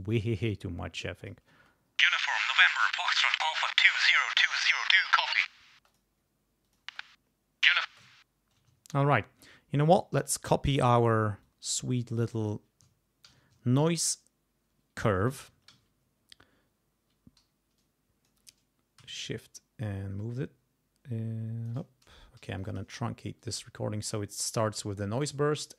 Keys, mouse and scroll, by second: 0.1-1.5 drag, 1.5 space, 2.7-4.0 drag, 4.5 click, 5.7 space, 5.9 click, 6.6 click, 6.8 space, 7.8 space, 8.0 ctrl+scroll down 2, 8.7-9.0 ctrl+scroll up 2, 9.2 ctrl+scroll down 2, 10.0 click, 10.8 r, 11.4-12.7 drag, 13.3 ctrl+c, 13.7 ctrl+scroll up 2, 15.2 click, 15.7 ctrl+v, 17.4 g, 17.8 click, 19.5-21.9 shift+drag, 22.4 g, 22.6 click, 23.4 click, 25.1 click.